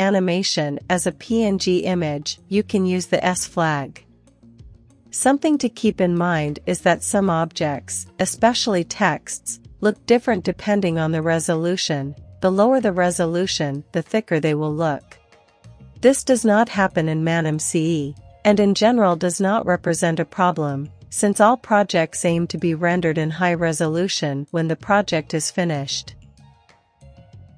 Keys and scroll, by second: 3.7 q, 5.0-5.7 typing, 14.3 q, 15.6 ctrl+l, 16.3-17.7 typing, 18.7 Return.